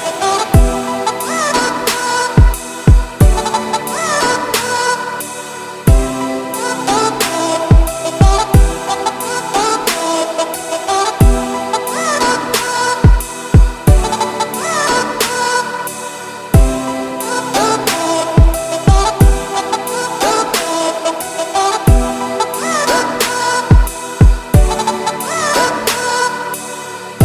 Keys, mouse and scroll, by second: 0.2-2.0 scroll up 7, 0.6-0.9 middle drag, 1.0 ctrl+s, 2.0 middle click, 2.2-2.7 scroll up 4, 2.7 shift+middle click, 3.0-3.4 scroll up 4, 3.4-4.1 middle drag, 4.1 click, 6.0 click, 6.9-8.8 drag, 8.8 e, 10.5 click, 14.5 middle click, 14.7 scroll up 2, 14.9 z, 15.8-17.1 shift+middle drag, 17.1 z, 18.4-19.0 scroll down 7, 19.0 middle drag, 19.2 z, 19.9 middle click, 20.1-20.7 scroll up 3, 20.4 shift+middle drag, 21.7 shift+middle click, 22.5 click, 26.4-26.9 scroll down 2, 26.9 click.